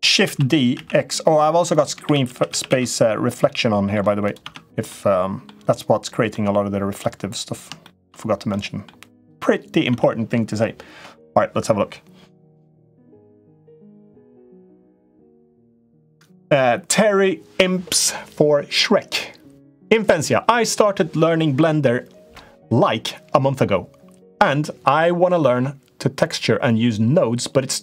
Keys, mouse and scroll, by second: 0.0 shift+d, 1.8 shift+r, 2.1 shift+r, 2.5 shift+r, 3.3 middle click, 4.0 click, 4.3 Tab, 4.7 middle click, 6.1 middle click, 7.6 shift+middle click, 8.3 middle click, 8.9 click, 9.7 Tab.